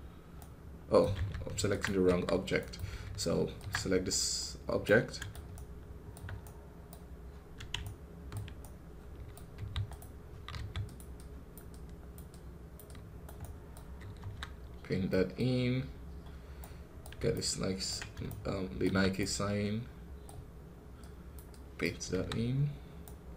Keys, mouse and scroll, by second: 0.2-1.7 right drag, 1.7 ctrl+Tab, 2.0 KP_1, 2.5-3.6 right drag, 3.6 ctrl+Tab, 4.0 middle click, 4.3 scroll up 1, 4.7-9.4 right drag, 9.4 f, 10.4 f, 11.0-13.3 drag, 13.3 right click, 14.1 KP_1, 14.6 scroll down 1, 14.9 middle click, 15.3-16.1 scroll up 5, 16.5-20.9 right drag, 20.9-22.0 drag, 22.0 KP_1, 22.3 scroll down 4, 22.9 right click.